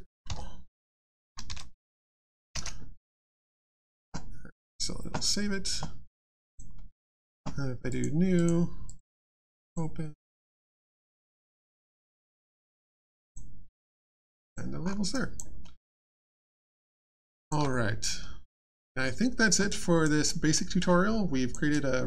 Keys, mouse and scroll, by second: 1.9 shift+1, 2.5 1, 2.5 Return, 6.2 alt+click, 6.7 alt+middle click, 7.0 alt+scroll down 1, 7.9 click, 9.5 click, 11.2 click, 13.0 click, 14.1 alt+click, 14.8 alt+scroll up 1, 15.1 alt+click, 15.6 alt+middle click, 15.8 alt+scroll down 1, 16.1 alt+click, 16.8 alt+middle click, 17.2 alt+click, 19.7 alt+click, 20.2 alt+middle click, 20.8 alt+click.